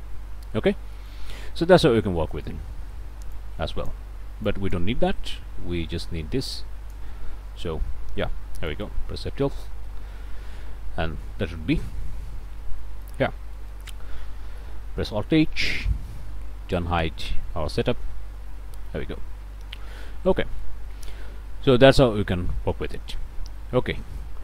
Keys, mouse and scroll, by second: 0.9 middle click, 1.6 middle click, 2.0 click, 2.3 middle click, 2.6 click, 3.3 middle click, 4.1 click, 4.5 middle click, 4.9-6.4 drag, 5.2 Delete, 6.4 middle click, 7.1 click, 7.9 scroll up 1, 8.1 click, 8.5 middle click, 9.2 F12, 12.8 middle click, 13.0 scroll up 1, 13.2 scroll down 1, 13.5 click, 14.6 alt+h, 17.5 click, 18.2 0, 19.8 0, 20.4 click, 20.9 click, 22.6 click, 24.2 shift+click.